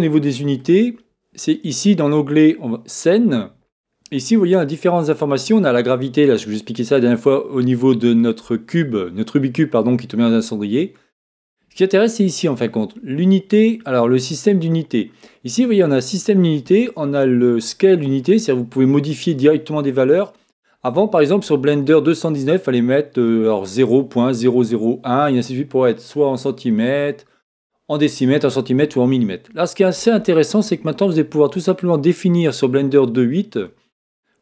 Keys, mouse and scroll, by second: 0.0-6.2 middle drag, 6.2-10.7 drag, 11.1 click, 33.5-34.4 drag.